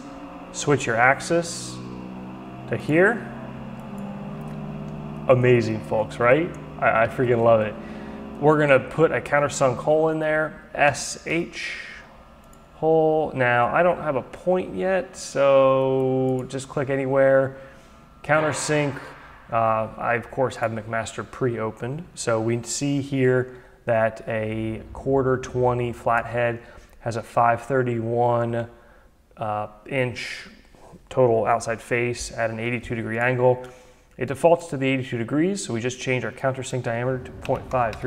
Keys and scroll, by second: 10.4 s, 11.3 h, 37.0 Delete, 37.4-38.0 typing.